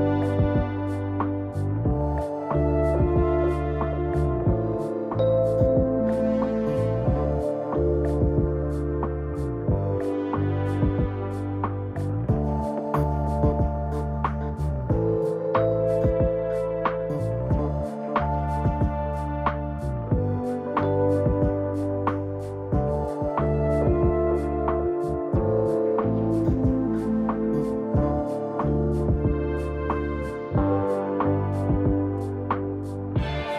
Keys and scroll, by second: 7.4 u, 22.1 u, 27.3 u, 29.3 0.